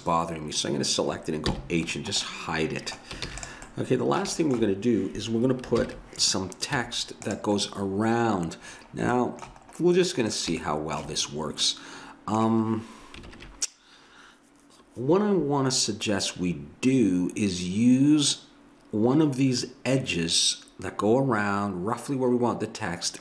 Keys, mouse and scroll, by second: 1.5 h, 2.3-4.0 middle drag, 3.3 ctrl+s, 5.8 ctrl+KP_1, 6.8 z, 13.3 ctrl+KP_1.